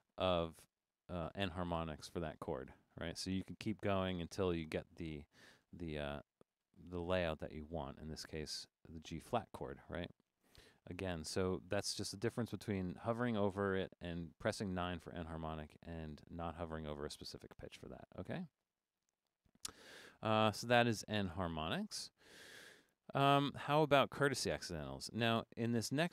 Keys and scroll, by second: 0.0-8.4 typing, 13.5 Up, 13.7 Up, 15.0 Up, 15.2 Up, 15.7 Up.